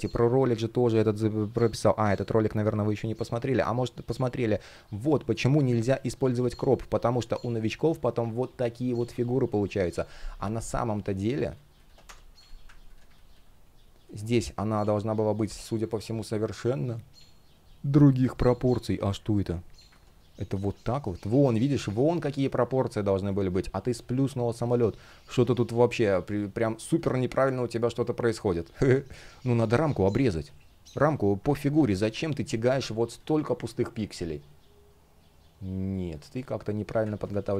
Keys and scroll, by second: 26.0 space, 29.3 shift+p, 31.0 super+z, 31.6 super+z, 33.5 space, 36.8 super+z.